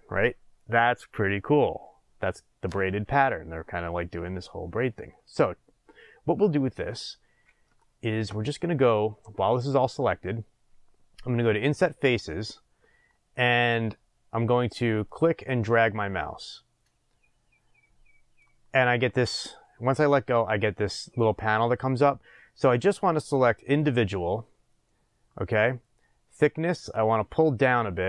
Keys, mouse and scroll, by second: 7.2-7.7 scroll, 7.8-11.8 shift+middle drag, 11.8 click, 15.1 click, 23.6 click, 26.3-28.0 drag.